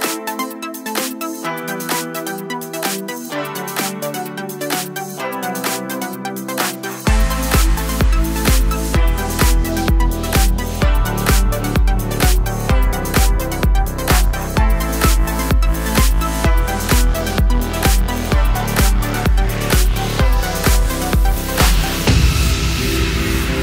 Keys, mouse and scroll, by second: 0.7 3, 0.8 click, 1.0 x, 1.6 click, 2.0 g, 2.5 3, 2.6 click, 2.7-4.5 middle drag, 3.1 e, 4.5 click, 4.6 Tab, 4.9 middle click, 5.1 shift+right click, 5.3 shift+a, 6.2 Tab, 7.0 click, 7.2-8.4 middle drag, 7.4 e, 8.4 click, 8.5-9.6 middle drag, 9.6 click, 9.7 middle click, 9.8 e, 10.4 click, 10.6 Tab, 10.8 shift+right click, 11.2 shift+a, 12.8-15.6 drag, 13.6 KP_Enter, 14.0 Tab, 15.7-16.8 middle drag, 15.9 f, 16.4 e, 16.8 click, 17.0 i, 17.3 click, 18.0-20.0 middle drag, 18.8 alt+d, 20.0 click, 20.0-21.7 middle drag, 20.7 alt+d, 21.7 click, 21.9 middle click, 22.3 drag, 23.1 shift+Tab, 23.5 click.